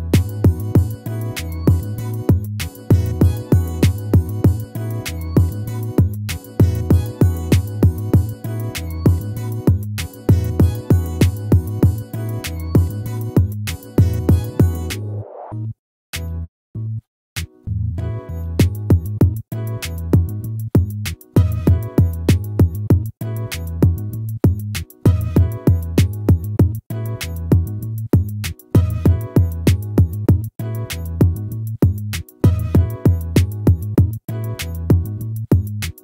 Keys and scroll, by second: 1.0 ctrl+-, 4.0 ctrl+-.